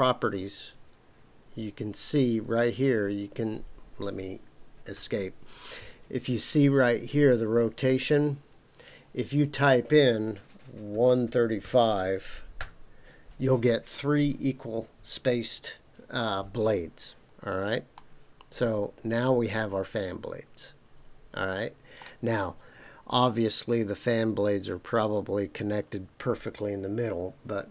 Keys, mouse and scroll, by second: 4.9 Escape, 9.3-13.7 drag, 17.9-22.0 middle drag.